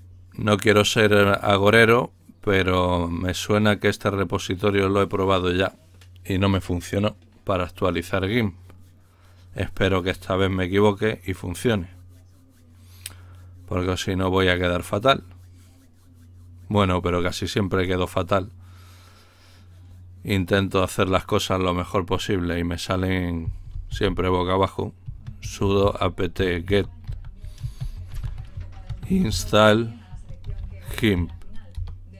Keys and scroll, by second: 23.4-31.7 typing.